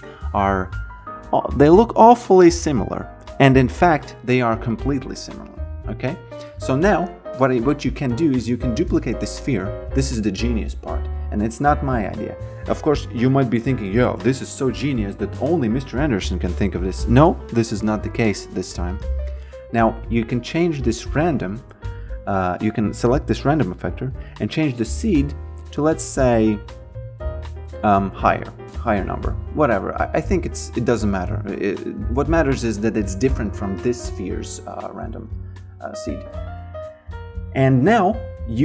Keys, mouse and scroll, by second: 5.0 click, 18.9 click, 23.0 click, 25.9 click, 28.4 click, 30.2 click, 37.9 click.